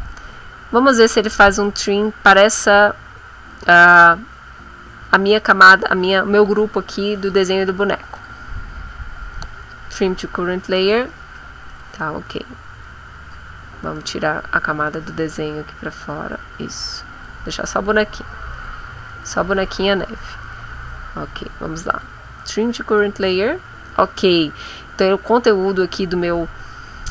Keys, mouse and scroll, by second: 1.5 click, 8.1 click, 9.3 click, 11.7 click, 12.8 scroll down 1, 14.0 click, 16.8 click, 18.4 click, 19.0 click, 20.4 click, 21.9 click, 22.9 click.